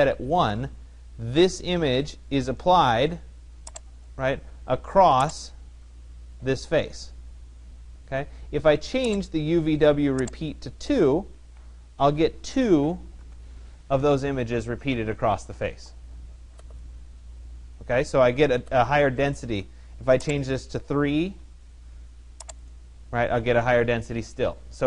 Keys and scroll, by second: 10.8 2, 13.1 Tab, 20.6 3.